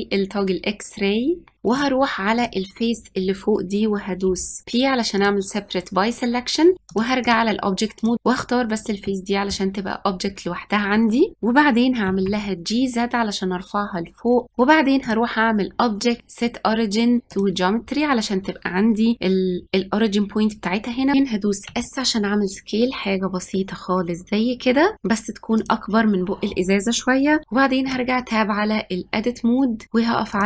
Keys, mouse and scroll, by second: 1.5 middle click, 1.6 click, 4.2 p, 6.7 click, 7.9 click, 9.0-11.6 middle drag, 12.0 g, 14.9-17.5 drag, 21.6 s, 27.8 Tab, 30.2-30.4 drag.